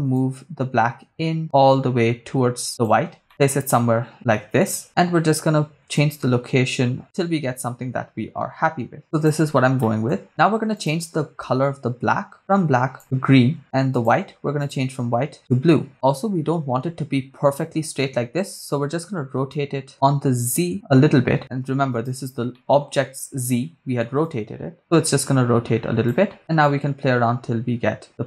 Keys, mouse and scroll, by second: 0.1-2.9 drag, 3.3-4.8 drag, 6.0-9.4 shift+drag, 9.8 middle click, 10.7 click, 13.9 click, 14.6 click, 19.5 click, 20.4-22.3 drag, 22.6 middle click, 24.2-26.2 drag, 26.6-28.2 drag.